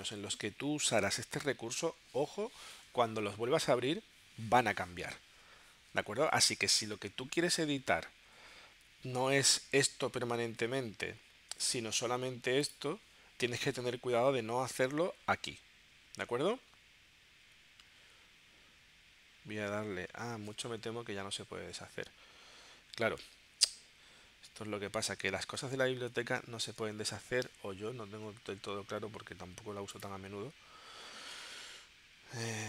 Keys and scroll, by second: 18.0 super+z, 20.1 super+z, 22.5 super+z, 23.2 shift+super+z, 24.5 shift+super+z, 26.4 shift+super+z.